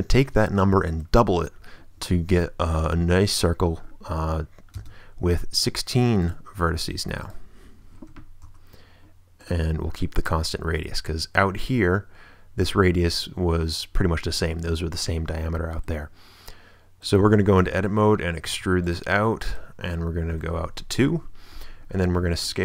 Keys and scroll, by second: 4.7 space, 8.1 6, 8.4 Return, 17.2 Tab, 18.4 e, 20.4 2, 21.0 Return.